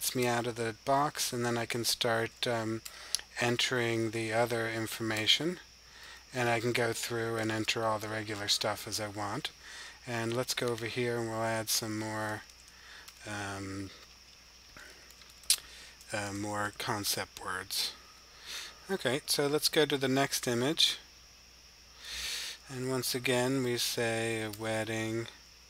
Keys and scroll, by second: 2.8 typing, 4.0-4.5 typing, 6.4-7.4 typing, 9.1-10.1 typing, 11.6-12.3 typing, 14.6-16.5 typing, 20.0 super+6, 22.7-25.6 typing.